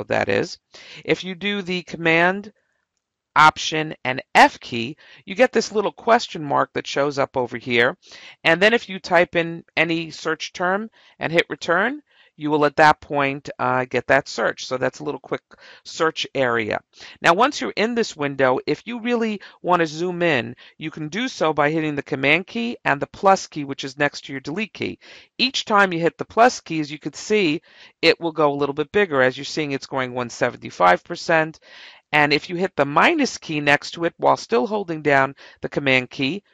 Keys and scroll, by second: 4.4 alt+f, 25.3 =, 26.9 =, 28.4 =, 36.2 -.